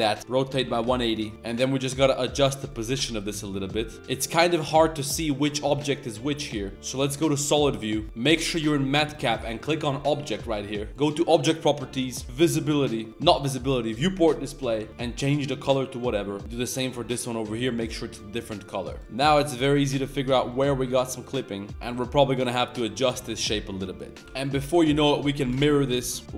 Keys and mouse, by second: 0.1 r, 1.1 middle drag, 1.3 r, 2.0-3.9 middle drag, 5.1 middle click, 5.5 g, 7.5 middle click, 7.6 middle click, 8.0-10.9 drag, 11.2 click, 12.2 click, 14.0 click, 18.9 right click, 19.0 middle click, 19.1-19.7 middle drag, 19.9 right click, 20.0 drag, 20.2 middle click, 20.5 middle click, 20.9 r, 21.7 alt+s, 21.7 middle click, 22.1 Tab, 22.3 click, 22.4 middle drag, 23.0 shift+middle drag, 23.4-23.8 middle drag, 24.0 middle drag, 24.2-24.7 typing, 26.0 shift+n, 26.2 g.